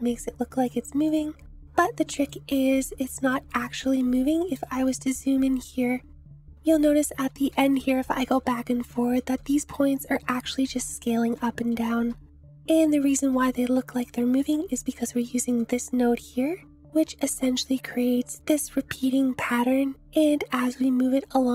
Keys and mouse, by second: 1.1 click, 1.6-2.3 middle drag, 3.1-3.5 shift+middle drag, 4.1-4.6 middle drag, 6.6 Left, 7.1 Right, 7.4 Right, 7.6 Right, 8.0 Left, 8.2 Left, 8.4 Left, 8.7 Left, 9.2 Right, 9.6 Right, 10.1 Left, 10.3 Right, 10.8 Right, 10.9 Right, 11.2 Right, 11.7 Left, 12.0 Left, 13.1 Left, 14.0 Right, 15.6-16.9 drag.